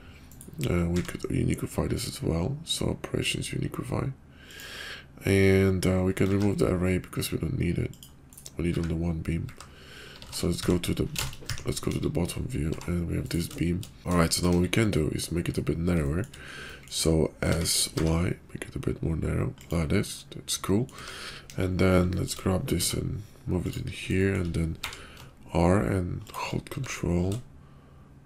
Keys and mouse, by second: 0.7 q, 6.2 ctrl+`, 8.7 `, 9.3 `, 11.4 `, 11.8 KP_5, 12.7 g, 14.0 ctrl+z, 14.0 `, 14.3 shift+middle click, 14.5 KP_5, 15.3 middle drag, 16.0 shift+middle click, 16.6 middle drag, 17.4 s, 20.2 middle click, 21.4 `, 21.4 KP_5, 22.1 shift+middle click, 22.7 g, 24.1 shift+middle click, 24.7 r, 26.8 g.